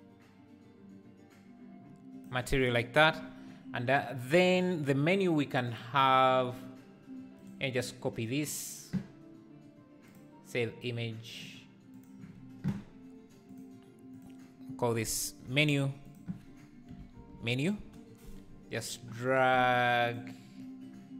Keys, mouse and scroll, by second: 14.2-19.9 drag.